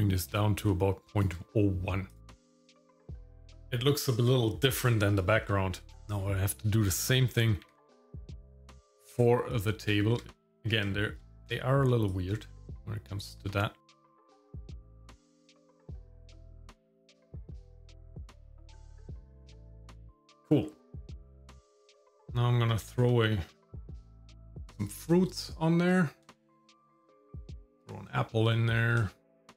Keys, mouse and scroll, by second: 2.1 click, 2.8 KP_Divide, 3.0 scroll down 2, 3.3 scroll up 2, 7.0 click, 7.7 KP_Divide, 8.6 shift+middle click, 9.2 Tab, 10.5 middle click, 11.0 shift+middle click, 12.1-13.5 drag, 14.0 ctrl+KP_Add, 14.4 shift+click, 14.8 ctrl+KP_Add, 16.1 click, 16.7 click, 17.2 BackSpace, 17.4 BackSpace, 17.9 click, 18.4 shift+a, 18.9 click, 19.5 Tab, 19.9 scroll down 3, 20.3 scroll up 3, 20.3 shift+middle click, 20.5 middle click, 20.9 click, 22.2 click, 24.0 click, 24.1 scroll down 4, 24.4 click, 26.3 shift+middle click, 26.4 scroll up 3, 26.6 middle click, 26.7 scroll down 1, 27.3 click, 27.6 click, 29.0 shift+middle click, 29.4 scroll up 1.